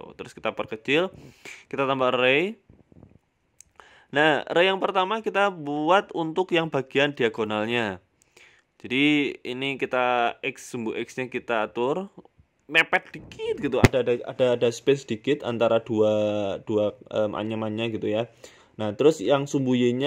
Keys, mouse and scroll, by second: 1.5 click, 3.5 scroll up 1, 3.6 scroll down 2, 4.3 shift+middle click, 5.6 click, 8.1 scroll up 1, 8.2 scroll down 2, 8.6 scroll down 1, 8.8 shift+middle click, 9.1-9.4 scroll up 3, 10.1 shift+click, 14.1 click, 15.6 KP_5, 16.5-17.2 scroll down 1, 17.2 click, 18.9 click.